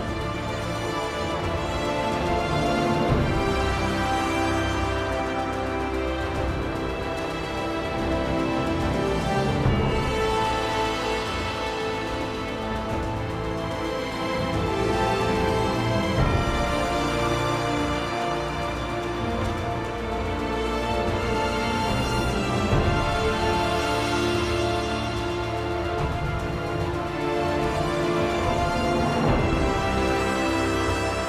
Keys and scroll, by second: 1.9 r, 3.2 r, 6.5 r.